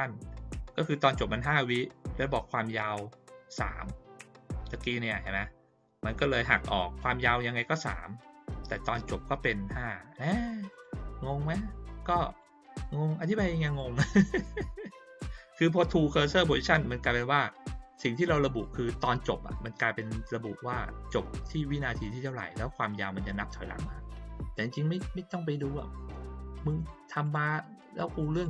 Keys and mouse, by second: 10.7 click, 12.0 click, 12.2 right click, 13.6 click, 27.2 click, 27.9 click.